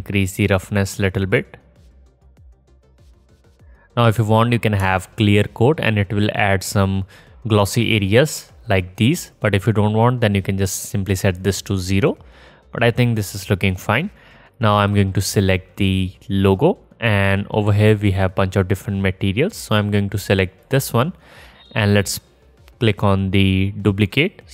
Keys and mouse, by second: 0.8-4.3 middle drag, 6.9-12.5 middle drag, 12.5-22.1 drag, 15.5 middle click, 15.5 right click, 18.8-24.5 middle drag, 18.8-22.1 right drag, 23.0 click, 23.0 right click.